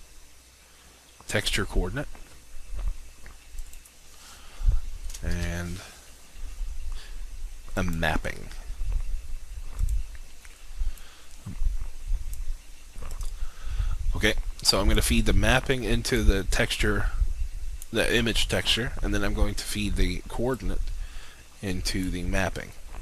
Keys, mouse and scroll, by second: 1.5 click, 5.3 shift+a, 7.8-23.0 drag.